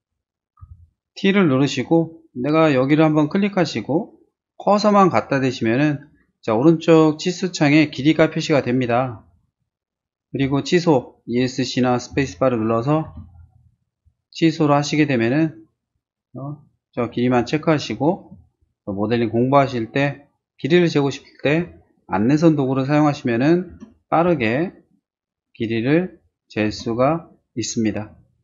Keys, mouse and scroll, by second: 0.6 t, 3.2 click, 12.1 space, 13.1 t, 13.9 middle click, 14.8 click, 17.4 space, 17.9 middle click, 18.2 middle click, 18.6 middle click, 21.5 t, 22.0 click, 23.7 space, 24.3 t, 24.7 scroll up 1, 25.6 click, 26.7 space, 27.9-28.4 scroll down 1.